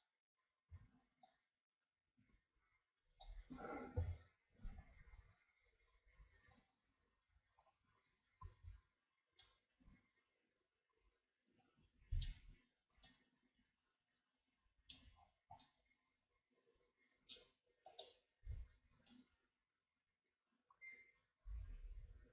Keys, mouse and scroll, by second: 0.8 z, 1.3-3.9 drag, 3.9 KP_1, 5.1 Tab, 6.6-7.6 scroll down 4, 7.6-8.4 scroll up 4, 8.4 ctrl+s, 8.9-9.4 scroll down 3, 9.4-12.4 middle drag, 12.8 shift+scroll down 2, 13.0-15.1 middle drag, 15.1-15.6 scroll up 5, 15.6-17.9 middle drag, 17.9 right click, 18.7-19.1 shift+scroll down 3, 19.1-22.3 middle drag.